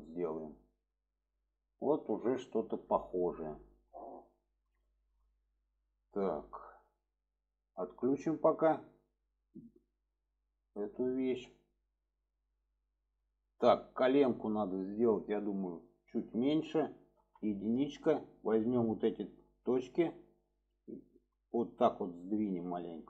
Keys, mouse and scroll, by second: 0.5 alt+middle click, 2.1 shift+middle drag, 2.9 shift+middle click, 3.9 shift+middle click, 5.1 shift+middle click, 6.5 click, 10.2 click, 11.4-12.5 middle drag, 12.7 middle drag, 13.6-14.4 middle drag, 14.6 shift+middle click, 16.0 middle click, 18.3-19.4 drag, 19.7 middle click, 20.7 click, 22.8 click.